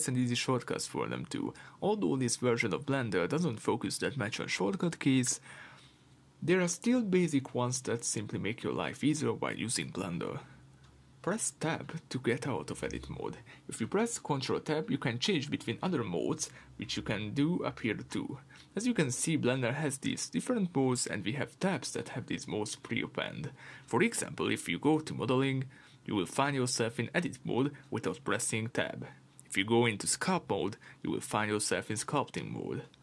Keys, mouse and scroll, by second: 4.2 2, 4.4 click, 5.0 shift+click, 5.8 r, 6.9 Escape, 7.5 g, 8.5 Escape, 9.4 Tab, 13.9 ctrl+Tab, 16.7 Escape, 22.5-27.0 drag, 31.7-33.0 drag.